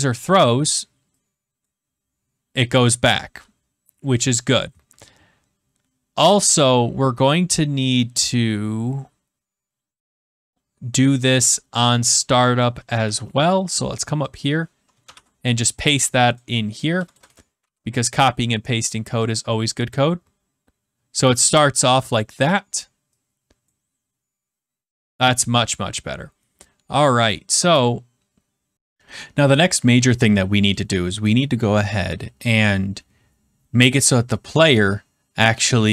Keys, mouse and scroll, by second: 28.7 click, 34.6 click.